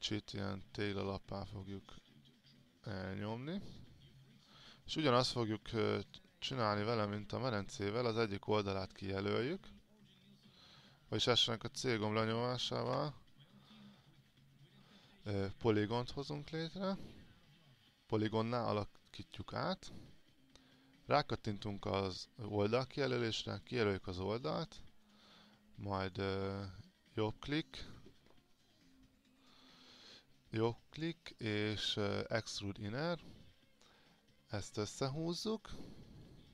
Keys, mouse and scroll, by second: 0.5 click, 3.5 alt+click, 4.7-7.3 drag, 8.3-9.0 scroll up 1, 9.3 alt+click, 11.9 click, 13.1 c, 15.6-24.6 drag, 24.6 right click, 32.6-36.5 drag.